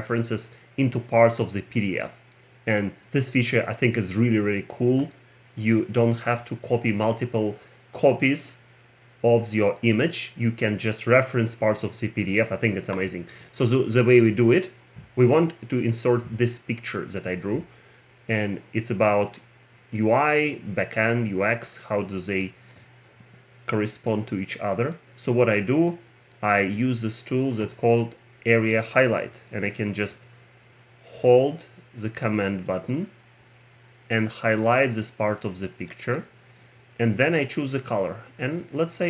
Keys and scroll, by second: 23.2 Return.